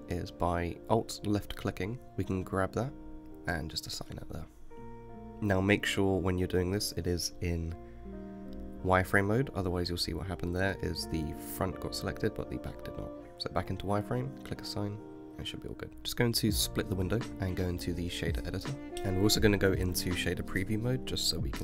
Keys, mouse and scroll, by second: 0.0 alt+click, 2.9 alt+shift+click, 5.1-7.0 middle drag, 9.5-11.7 middle drag, 11.7 click, 12.1-12.5 middle drag, 12.5 Tab, 12.9 middle click, 13.3 alt+click, 14.4 shift+click, 15.2 click, 15.9 middle click, 16.3-18.9 drag, 18.9-20.9 middle drag, 20.9 drag.